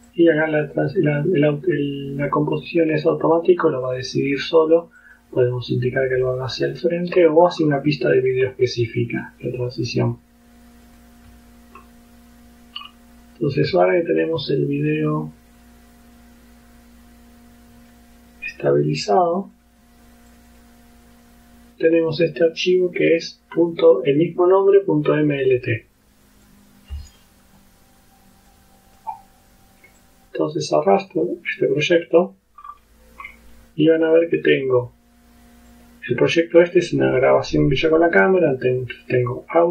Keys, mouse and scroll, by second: 0.1 click, 0.8 click, 3.3 click, 3.9 click, 5.1 click, 6.3 click, 6.9 ctrl+scroll down 2, 7.5-8.0 ctrl+scroll up 3, 8.2-8.9 scroll down 4, 10.9 click, 13.6-18.1 drag, 19.0 click, 20.4 click, 26.5 click, 28.5 click, 30.1-32.6 drag, 32.6-33.1 scroll down 2, 33.3 scroll down 2, 35.8 click, 39.2 click.